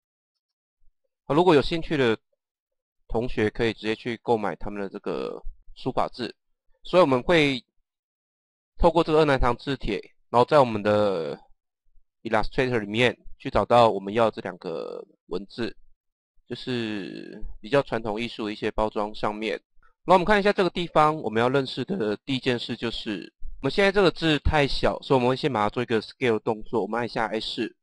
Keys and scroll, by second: 0.3 Return, 6.6 typing, 9.9 typing.